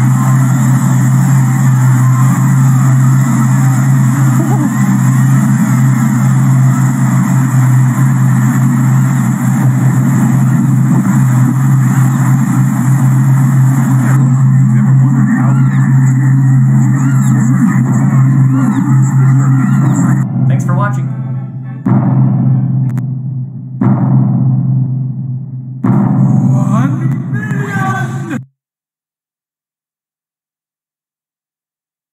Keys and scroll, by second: 9.8-10.7 Left, 12.3 Left, 13.3 Left, 15.1-16.2 Left.